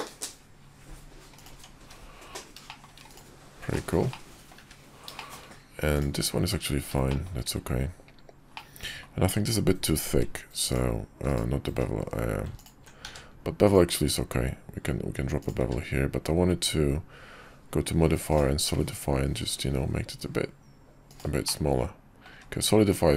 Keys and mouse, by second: 1.5 Tab, 1.8 `, 2.7 shift+middle click, 3.7-4.0 middle drag, 4.1-4.5 middle drag, 4.5 `, 4.6 `, 5.1 shift+middle click, 7.1 shift+middle click, 8.5-9.0 middle drag, 9.7 q, 11.7 q, 13.0 q, 15.6 q, 21.5-22.3 middle drag, 22.4 `.